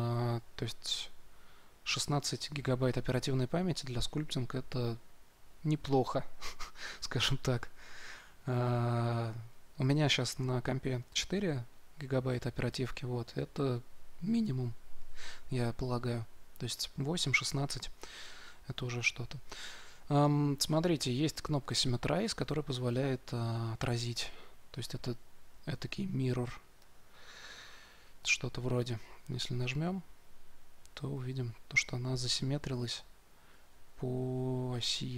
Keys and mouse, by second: 23.1-25.0 middle drag, 25.0 z, 25.7 z, 29.3-35.1 drag.